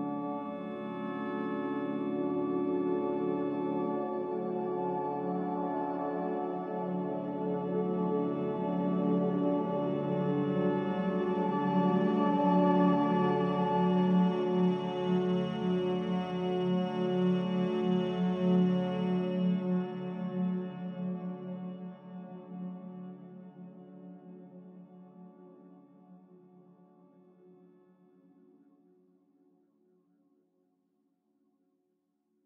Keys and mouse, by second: 0.0 e, 9.0 g, 12.2 shift+middle click, 13.0 g, 28.2 e.